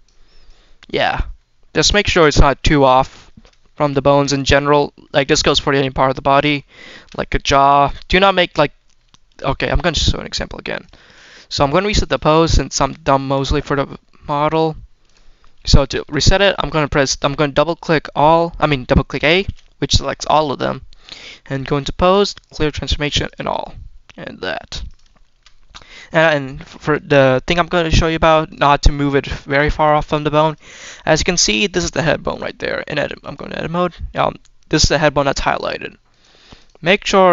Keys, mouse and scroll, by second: 0.3 click, 1.0 scroll down 2, 1.2-2.4 middle drag, 2.4-3.1 scroll down 3, 2.9 middle click, 3.5 shift+middle click, 3.9 middle click, 4.2 scroll up 2, 4.5 scroll down 1, 4.7 middle click, 5.3 shift+middle click, 6.0 shift+middle click, 6.4 shift+middle click, 6.8 shift+middle click, 7.0 scroll up 2, 7.3 middle click, 7.9 shift+middle click, 8.1-8.6 shift+scroll down 4, 8.6 middle click, 9.5-10.6 scroll down 1, 10.6-11.1 drag, 11.9 click, 12.3 Tab, 13.1 Tab, 14.4-15.0 drag, 15.6 shift+middle drag, 19.3 a, 21.4-23.2 drag, 24.7 click, 25.1 shift+middle drag, 25.8-26.5 scroll up 2, 26.6 shift+middle drag, 26.8-27.8 scroll up 2, 28.3-28.8 drag, 29.3 click, 29.7 scroll down 1, 30.3 click, 31.7-32.2 drag, 33.1 click, 36.0-36.5 drag, 36.9 click, 37.2-37.3 scroll down 1.